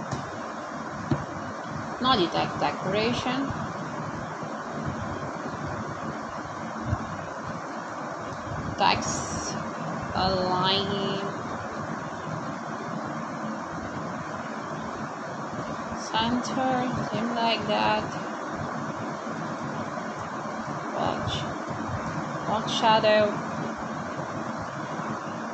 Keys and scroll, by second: 1.4 ;, 1.6 Return, 3.7-6.6 typing, 6.7 Return, 10.0 0, 10.9 space, 11.2 1, 11.7 5, 13.8 p, 15.4-17.7 typing, 18.9 BackSpace, 20.1 5, 20.6 p, 21.1 x, 22.2 space.